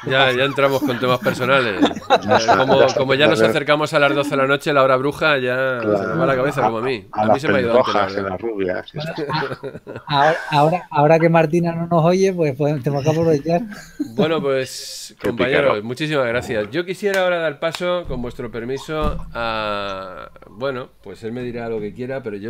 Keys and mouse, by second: 18.0 shift+middle click.